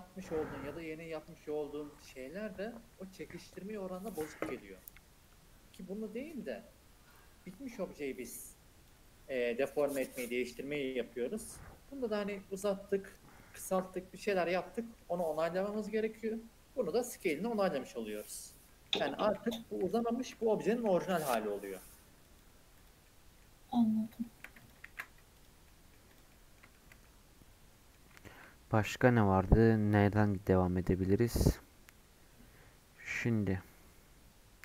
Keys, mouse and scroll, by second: 13.6 click, 13.8 scroll down 1, 13.9-15.0 middle drag, 15.0 scroll up 2, 15.1-17.4 middle drag, 17.4-17.7 scroll up 2, 17.7 middle click, 18.7 scroll down 4, 19.3 middle click, 19.9 click, 20.3 middle click, 20.9 s, 22.7 click, 23.0 middle click, 23.4 scroll up 2, 23.8 scroll down 2, 24.2 shift+middle click, 24.6 click, 24.8 ctrl+a, 25.6 middle click, 26.1 click, 26.3-27.9 middle drag, 27.9 scroll up 1.